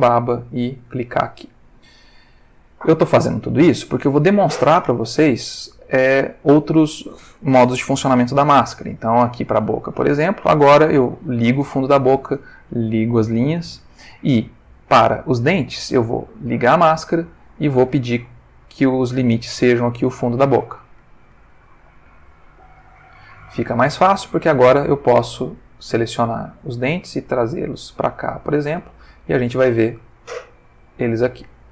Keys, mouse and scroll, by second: 0.8 click, 10.0 click, 11.3 click, 12.8 click, 15.6 click, 16.4 click, 20.8 click, 21.7 click, 24.5 Tab, 25.3 click, 26.8 g, 28.4 click, 28.8 Tab, 30.7-31.7 ctrl+middle drag.